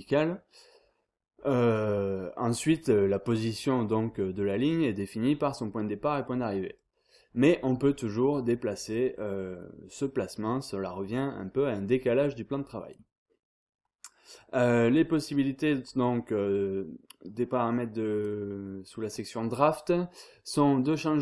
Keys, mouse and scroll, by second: 0.1-3.1 drag, 6.7 click, 8.4 click, 11.7-13.4 drag, 15.6 click, 17.6 click, 19.1 click, 20.9 click.